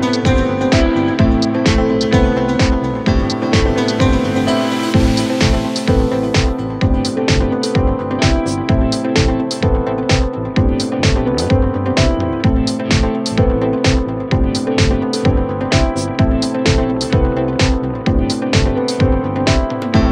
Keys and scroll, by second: 11.8 shift+Home, 12.3 6, 12.7 Return, 15.3 F3, 15.7 Escape, 17.0 shift+Page_Up, 18.1 c, 18.3 e.